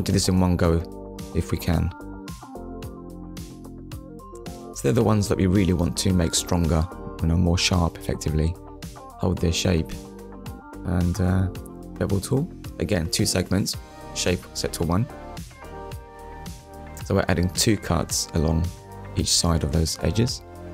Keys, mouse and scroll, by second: 1.0 alt+shift+click, 1.6 middle click, 3.1 scroll down 1, 3.5 middle click, 9.3 scroll up 1, 9.6 middle click, 12.6 click, 15.5 click.